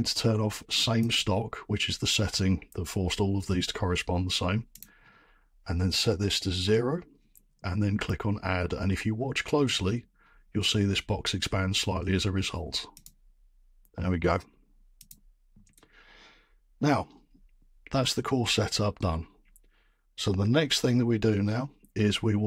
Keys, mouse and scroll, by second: 1.1 click, 4.8 click, 6.0 BackSpace, 6.6 0, 13.0 click, 15.1 click, 20.1 click.